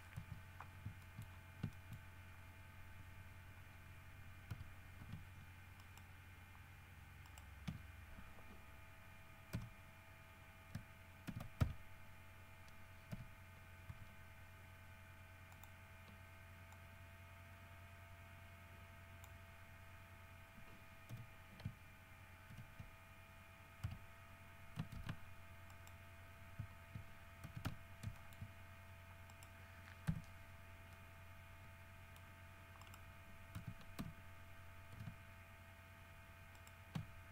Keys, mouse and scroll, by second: 0.4 KP_Decimal, 1.2 shift+middle click, 1.5-1.8 shift+scroll up 1, 1.9 shift+middle click, 4.7 3, 6.0 alt+shift+right click, 7.4 alt+shift+middle click, 9.7 y, 11.5 ctrl+f, 11.8 ctrl+s, 13.3 t, 14.1 t, 15.7 click, 16.9-19.6 drag, 21.3 l, 22.7 shift+h, 24.0 3, 25.2 alt+a, 25.9 middle click, 27.6 shift+x, 27.8 f, 28.4 shift+middle click, 29.5 middle click, 30.3 KP_Decimal, 31.1-32.6 middle drag, 33.0 middle click, 33.8 x, 34.2 f, 36.8 alt+shift+right click.